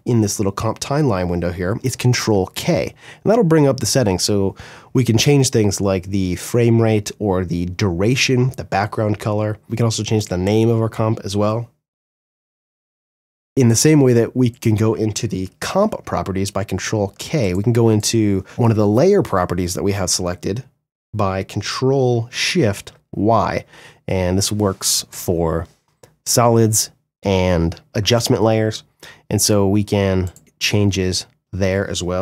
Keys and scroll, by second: 1.1 ctrl+k, 11.4-12.4 typing, 13.4 ctrl+shift+y, 15.5 ctrl+k, 22.0 ctrl+shift+y, 31.7 ctrl+k.